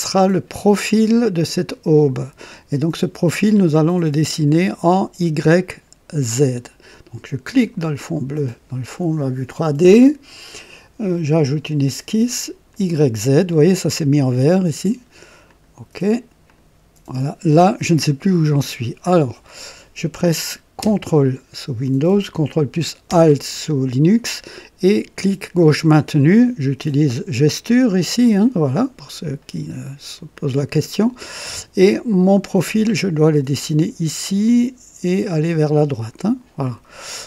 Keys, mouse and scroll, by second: 7.5 click, 11.0 click, 12.6 click, 15.4 click, 16.4 click, 17.6-17.9 scroll up 2, 19.0-19.8 right drag, 25.6 ctrl+alt+click, 29.4-30.1 right drag, 30.3 click.